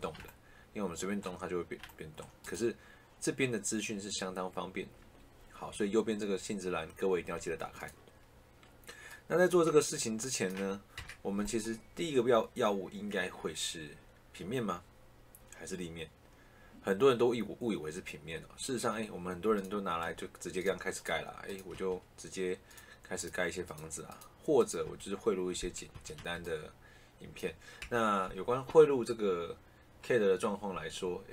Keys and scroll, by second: 10.9 Delete, 21.6 Escape, 24.7 Escape, 27.7 Delete.